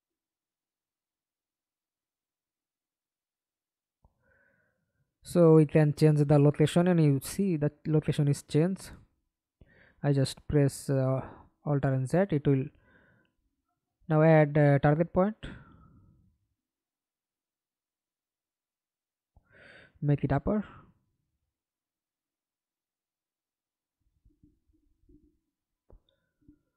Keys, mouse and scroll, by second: 1.3 scroll up 2, 1.6 alt+click, 7.7 middle click, 8.5 ctrl+z, 8.8 ctrl+z, 9.2 ctrl+z, 12.1-13.4 typing, 16.0-16.8 typing, 17.3-17.7 scroll down 6, 17.9 alt+click, 19.7 scroll down 3, 26.6 right click.